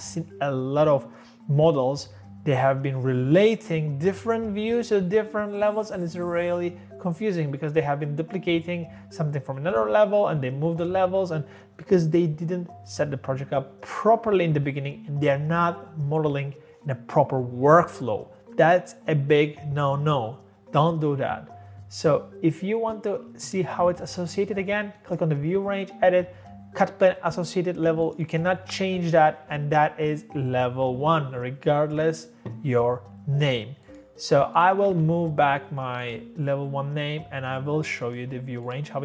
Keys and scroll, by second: 34.9 ctrl+z.